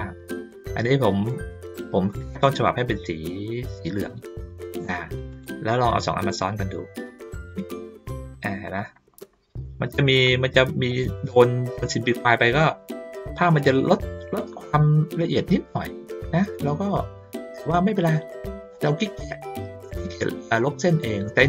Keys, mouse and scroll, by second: 8.8 ctrl+middle click, 9.1 ctrl+middle click, 9.8 middle click, 10.9 middle click, 14.4 ctrl+scroll down 1, 15.0 ctrl+middle click.